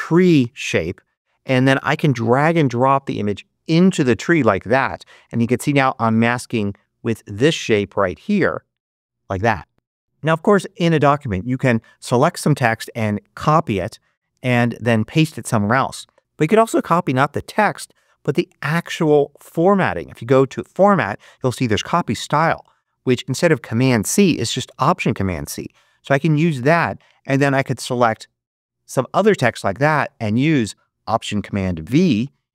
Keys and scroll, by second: 14.9 super+c.